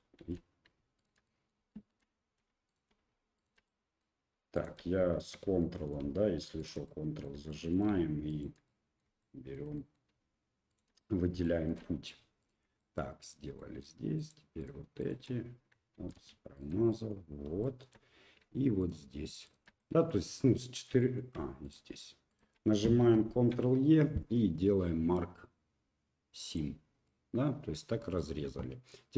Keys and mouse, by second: 0.2 ctrl+z, 1.0 ctrl+click, 1.2 middle click, 1.7 shift+middle click, 2.7 shift+click, 3.4 shift+click, 3.6 middle click, 4.5 shift+click, 5.6 shift+click, 6.6 ctrl+right click, 6.8 middle click, 7.5 shift+middle click, 8.3 ctrl+middle click, 8.6 middle click, 9.2 shift+middle click, 9.7 middle click, 10.7 ctrl+click, 11.0 middle click, 11.4 shift+middle click, 12.4 ctrl+right click, 12.8 middle click, 13.5 shift+middle click, 14.2 shift+click, 14.6 shift+click, 15.0 shift+click, 16.0 ctrl+z, 16.5 shift+click, 16.9 middle click, 17.6 shift+click, 18.8 shift+click, 19.4 shift+click, 19.8 middle click, 20.6 shift+middle click, 21.0 middle click, 21.6 shift+click, 22.3 shift+click, 23.3 ctrl+e, 27.0 middle click.